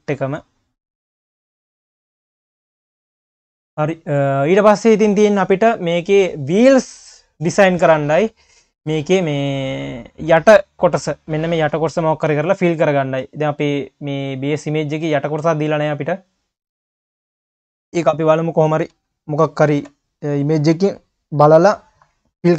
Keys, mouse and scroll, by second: 0.2-1.7 drag, 2.5 click, 3.1 ctrl+s, 4.1-7.2 drag, 11.4 q, 12.3 q, 14.5 click, 14.9-15.5 scroll down 6, 15.5 q, 17.6 KP_1, 18.9 KP_3, 19.7 ctrl+s, 20.4 scroll up 1.